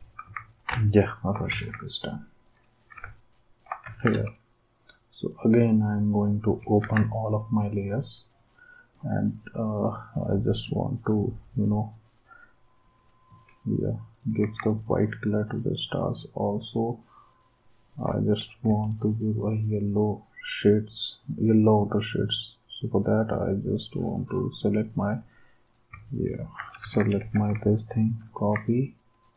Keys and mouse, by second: 0.2 ctrl+s, 1.5 ctrl+s, 2.5 d, 3.9 ctrl+s, 6.8 ctrl+s, 7.7 d, 14.4 ctrl+s, 18.6 v, 19.3 d, 26.6 ctrl+c, 27.7 d.